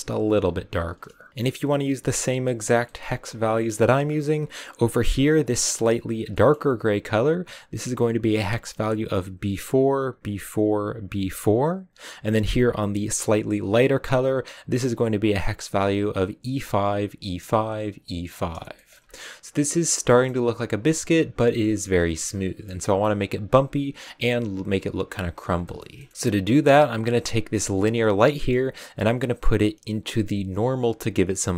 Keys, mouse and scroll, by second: 1.3-1.7 scroll up 4, 5.1-11.6 drag, 13.1 click, 18.6 shift+middle click, 18.9 scroll up 1, 20.0-26.1 shift+middle drag, 26.1 a, 27.7-31.3 drag.